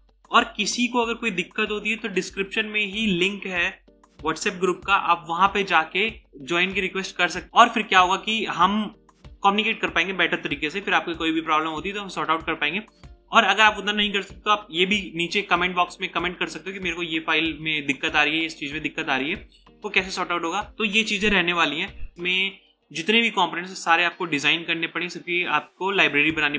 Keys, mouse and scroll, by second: 20.7 right click.